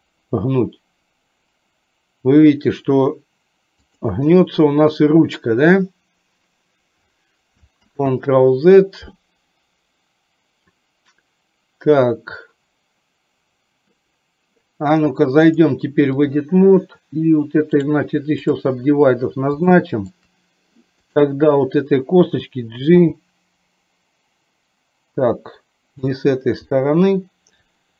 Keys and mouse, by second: 7.9 ctrl+z, 15.6 click, 17.9 right click, 19.9 shift+middle click, 21.1 click, 23.0 g.